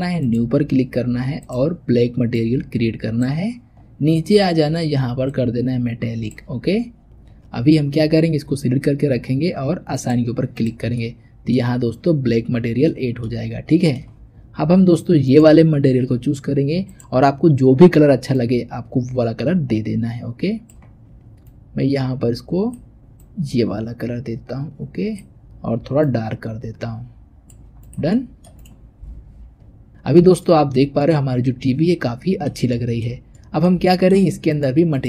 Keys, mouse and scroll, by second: 3.5-5.1 scroll down 6, 5.1-6.8 drag, 6.8-8.7 scroll up 7, 9.8 click, 10.8-13.4 middle drag, 13.4 scroll up 1, 13.6-15.1 shift+middle drag, 15.1 click, 16.7 click, 28.0 middle click, 28.5 click, 29.1 Tab, 29.8-34.4 middle drag, 34.4 click, 34.8 click.